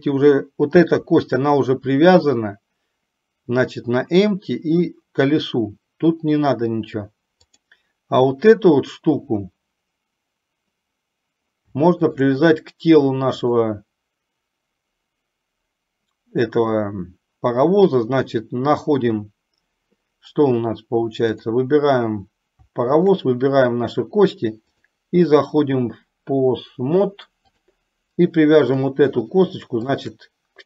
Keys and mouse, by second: 7.8 click, 12.1 shift+click, 13.7-20.0 drag, 23.0 shift+click, 24.9-28.0 drag, 29.0 click, 30.0 shift+click.